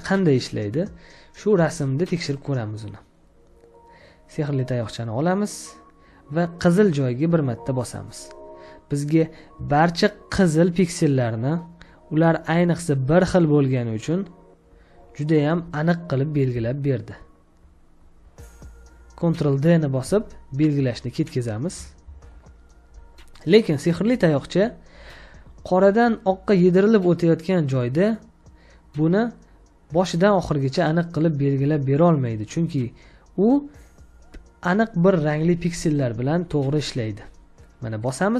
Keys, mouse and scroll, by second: 9.5 space, 9.7 ctrl+click, 12.7 ctrl+click, 14.9 ctrl+click, 15.5 space, 16.5 ctrl+space, 16.7 ctrl+click, 16.7 ctrl+space, 17.9 ctrl+space, 21.9 ctrl+d, 22.9 space.